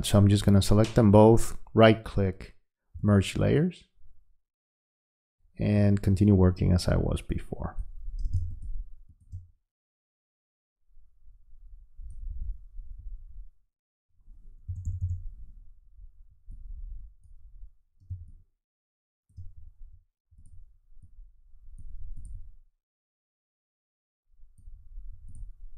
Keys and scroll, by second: 8.3 space, 18.1 space.